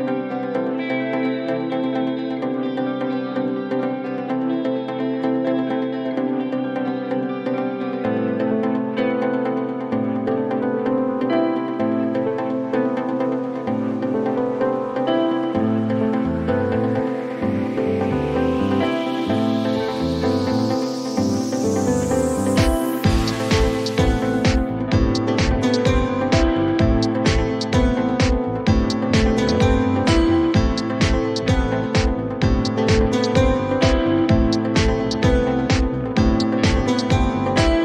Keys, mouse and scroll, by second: 5.4 click, 9.3 click, 10.1 click, 10.3 click, 12.9 click, 15.7 click, 16.3 typing, 17.3 Return, 20.3 click, 21.1-22.0 typing, 23.5 click, 23.7 click, 27.1 click, 27.5 typing, 27.9 Return, 29.9 click, 30.6 typing, 30.8 Return, 33.1 click, 37.2 click.